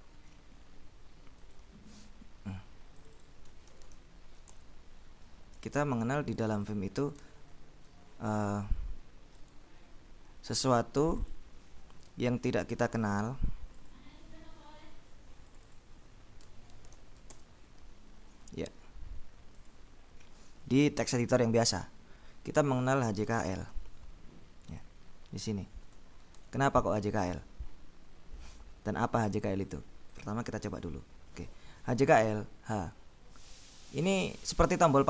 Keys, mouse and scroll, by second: 0.0 right click, 1.5 click, 1.8 click, 3.7-4.5 typing, 4.6 shift+Return, 5.8-7.3 drag, 9.5 right click, 11.3 click, 13.1-13.7 scroll up 2, 14.1-14.4 scroll up 2, 15.6-16.4 scroll up 2, 16.6-17.5 typing, 19.6-20.3 scroll up 2, 22.7-24.0 typing, 24.9-25.3 scroll up 2, 26.0 Escape, 29.8-30.9 scroll up 2, 30.9 Escape, 32.9 h.